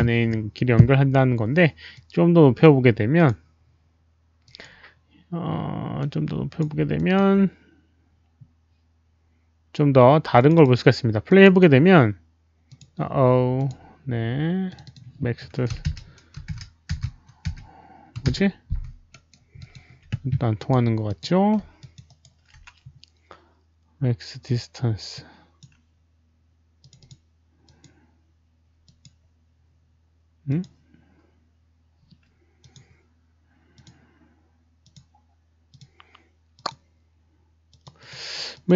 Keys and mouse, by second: 1.9-3.2 drag, 4.4 click, 5.9 click, 6.9 alt+click, 10.3 alt+click, 11.2 alt+click, 12.7 alt+click, 13.5 click, 14.6 click, 14.8 click, 15.7-20.0 typing, 15.8 Return, 16.4 alt+click, 16.9 Return, 18.1 click, 19.0 alt+right drag, 19.5 alt+drag, 20.5 alt+click, 21.0 alt+click, 21.7 alt+click, 22.0 alt+right drag, 24.8-25.6 typing, 25.1-25.5 alt+drag, 25.1 alt+right click, 26.6 alt+right click, 26.7 Return, 26.7 alt+click, 26.7 alt+right click, 26.7 5, 26.9 alt+click, 27.6 alt+click, 28.5 alt+right click, 28.8 alt+right click, 28.8 alt+click, 29.1 alt+right click, 30.3 alt+right click, 30.4 alt+click, 31.3 alt+click, 31.3 alt+right click, 32.5 alt+click, 32.5 alt+right click, 33.7 click, 34.8 click, 35.6 click, 36.5 click, 37.6 click, 37.9 click, 38.5 click.